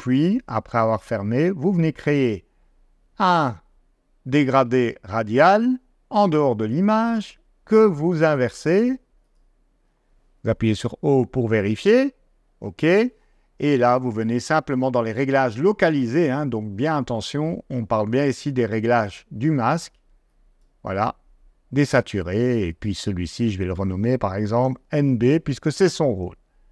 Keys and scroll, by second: 10.4 o, 24.4 shift+n, 25.2 Return.